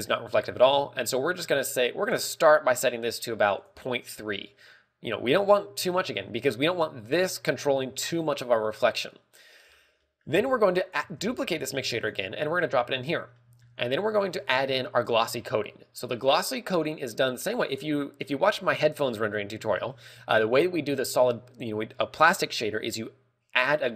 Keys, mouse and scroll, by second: 1.1 click, 1.6 click, 1.8 click, 2.7 click, 4.0 click, 12.4 click, 12.4 scroll up 3, 12.4 shift+d.